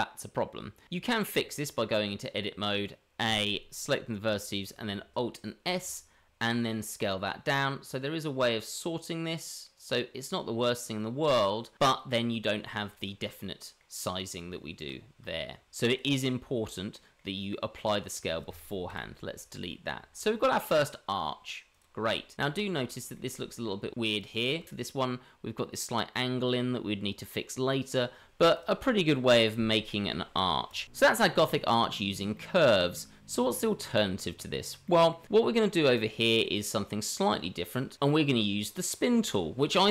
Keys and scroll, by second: 3.2 a, 5.6 alt+s, 14.4 Tab, 15.2 Tab, 15.7 Tab, 18.9 Delete.